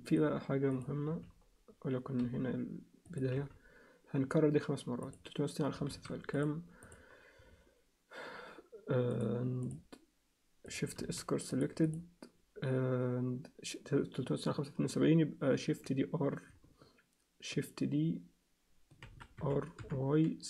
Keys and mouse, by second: 1.1 z, 2.2 g, 3.3 z, 5.0 click, 5.9 shift+s, 6.8 click, 9.1 click, 11.0 shift+s, 11.8 click, 19.0 shift+d.